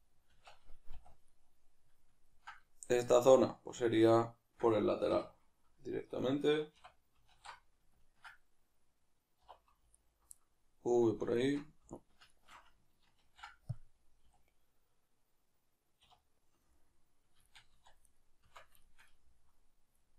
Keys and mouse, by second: 0.3 Tab, 1.3-9.9 middle drag, 5.1 2, 7.3 alt+q, 9.4 2, 9.9 alt+right click, 10.4-11.3 middle drag, 11.3-13.3 alt+shift+right drag, 13.3 ctrl+e, 16.1 \, 16.7-17.7 middle drag, 17.7 Tab, 18.1-18.5 right drag, 18.5 Tab, 18.9-20.1 shift+middle drag.